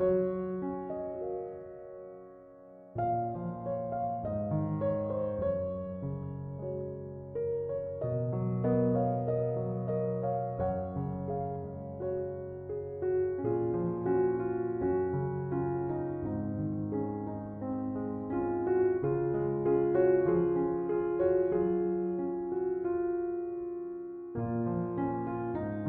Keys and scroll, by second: 15.5-16.8 typing, 19.1 9, 19.4 0, 19.7 Return.